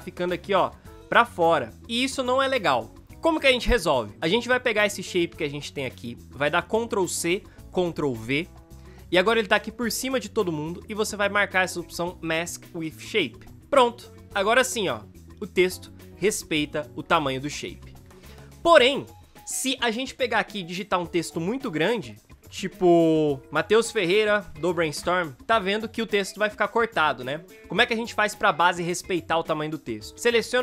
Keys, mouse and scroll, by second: 0.1 v, 0.7 space, 7.1 ctrl+c, 8.1 ctrl+v, 14.5 space, 22.3 ctrl+a, 23.5 Right, 23.9-25.0 typing, 29.4 ctrl+z.